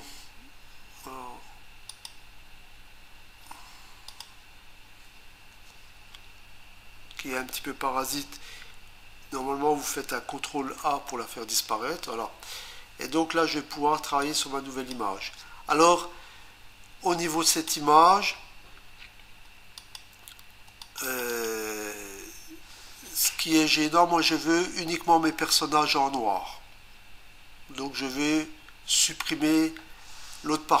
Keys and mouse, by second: 1.9 click, 4.1 click, 10.8 ctrl+a, 14.2 click, 17.5 click, 19.8 ctrl+click, 20.8 click, 21.0 click, 21.2 double click, 21.3 click.